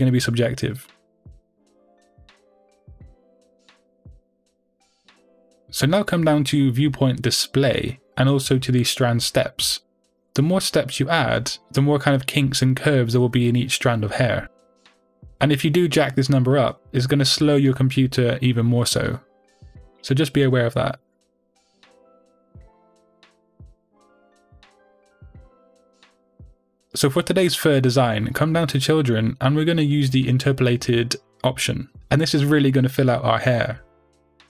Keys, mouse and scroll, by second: 3.8-7.8 middle drag, 9.9-20.4 middle drag, 9.9-15.5 scroll down 2, 15.5-17.2 scroll down 1, 20.4-21.9 drag, 21.6-21.9 scroll up 2, 21.9-34.4 middle drag, 26.3-28.7 scroll down 2, 28.7-29.5 scroll down 1, 29.5-30.7 scroll down 1.